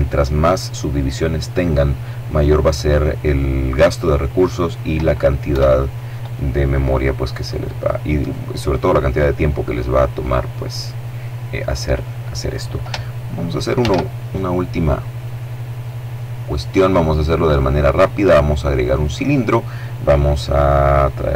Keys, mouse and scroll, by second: 4.7 KP_0, 6.6-7.7 middle drag, 7.7-8.5 scroll up 1, 8.5 middle click, 10.4 middle click, 11.2 middle click, 11.8-12.3 scroll up 3, 12.9 shift+a, 18.1 click, 20.0-21.3 drag.